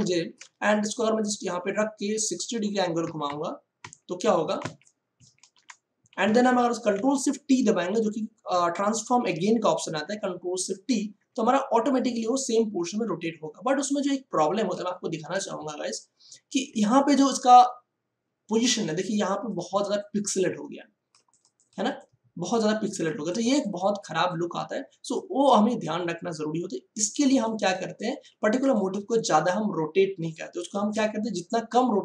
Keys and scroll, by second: 3.0 6, 4.5 0, 5.1 Return, 10.7 ctrl+alt+shift+t, 12.3 ctrl+alt+shift+t, 15.4 space.